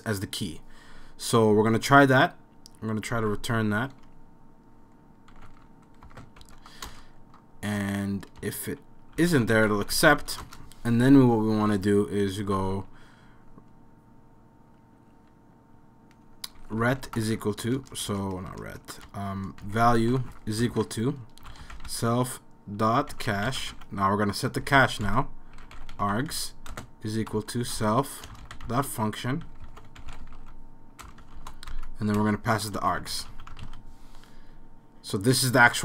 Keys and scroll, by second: 2.9-4.0 typing, 5.3-6.4 typing, 6.9 Return, 8.4-10.7 typing, 12.3-13.1 typing, 16.4-33.8 typing.